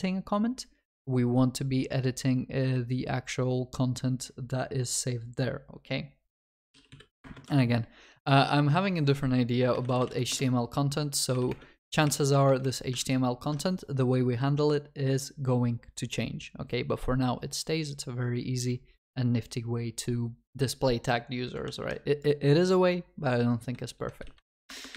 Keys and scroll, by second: 7.3 Return, 13.0 ctrl+shift+Left, 21.8 ctrl+s.